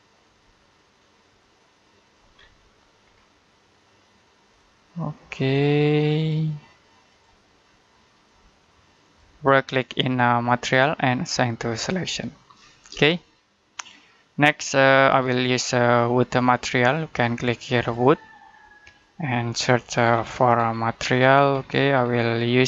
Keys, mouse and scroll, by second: 2.2 scroll down 1, 2.4 middle click, 2.9-4.3 scroll up 1, 4.3 click, 10.3 right click, 11.6 click, 12.4 scroll down 1, 12.7 scroll up 1, 13.0 shift+middle click, 16.2 click, 19.2-20.6 scroll down 1.